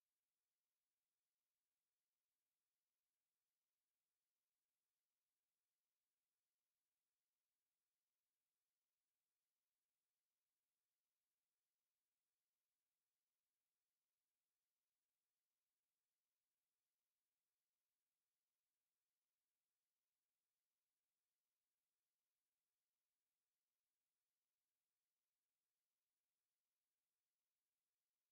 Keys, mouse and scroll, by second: 1.1 click, 1.8-3.2 drag, 3.7-4.7 scroll down 2, 7.4 click, 7.9-8.2 scroll down 1, 10.4 click, 11.5 KP_8, 11.9 KP_Enter, 17.9 click, 19.1 KP_1, 19.8 click, 20.5 KP_1, 21.5 click, 22.9 KP_8, 23.1 KP_Enter, 26.3 click, 27.8 click.